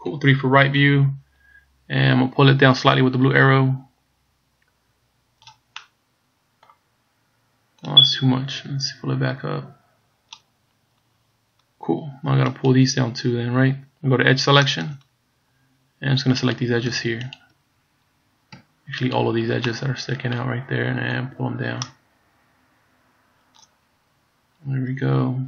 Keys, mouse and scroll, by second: 0.1 KP_3, 1.2-1.8 scroll up 2, 3.3 click, 6.0 middle click, 8.1 click, 10.8 scroll up 2, 12.7 right click, 14.8 click, 15.4-15.7 scroll up 3, 16.5 right click, 17.4 shift+right click, 18.0-18.5 scroll down 1, 19.1 shift+right click, 19.7 middle click, 21.3 click, 24.4-24.7 scroll down 2.